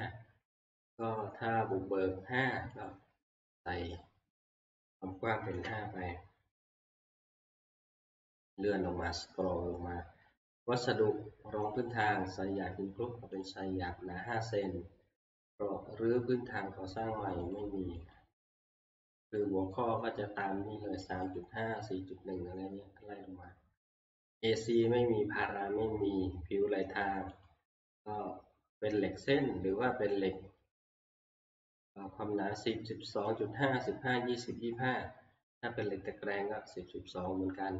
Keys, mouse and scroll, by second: 2.9 click, 3.9 click, 4.8 click, 5.6 5, 7.1 middle click, 8.0 middle click, 8.3 middle click, 11.8 click, 13.5 click, 17.5 click, 18.1 click, 19.4 click, 21.2 click, 22.5 middle click, 22.6-23.1 scroll, 27.5 click.